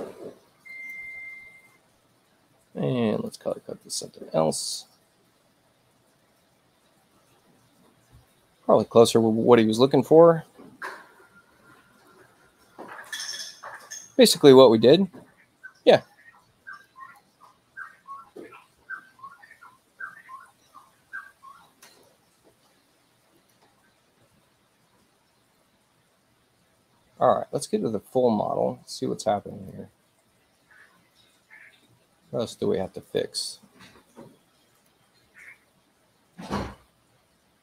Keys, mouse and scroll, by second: 0.7 click, 3.1 click, 4.6 click, 12.9 click, 16.8 click, 19.4 space, 21.9 click, 23.4 click, 29.5 click, 33.0 click, 34.7 click.